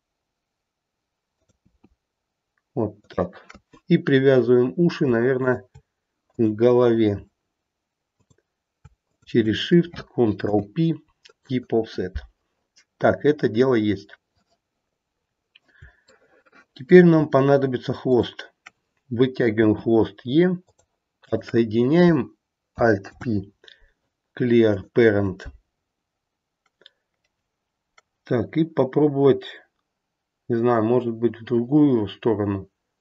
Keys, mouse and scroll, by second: 1.6 e, 5.3 shift+click, 6.2 click, 8.1 click, 9.0 shift+click, 10.4 ctrl+p, 15.1-15.7 scroll down 1, 15.7-16.1 scroll down 2, 16.1 shift+middle click, 17.1-17.7 scroll up 1, 17.7 scroll up 1, 18.0 click, 19.6 e, 23.0 alt+p.